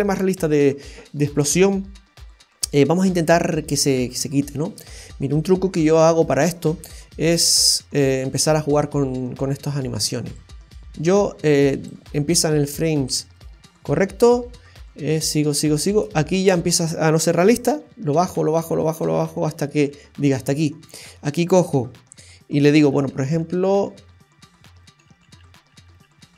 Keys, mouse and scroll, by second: 2.5-3.4 scroll down 4, 3.1 middle click, 4.9 scroll up 1, 7.5 click, 10.3 click, 11.9 space, 13.2 space, 14.9 space, 15.8 space, 17.8 Left, 18.1 Left, 18.4 Left, 18.7 Left, 19.0-19.9 Left, 22.9-26.3 Left.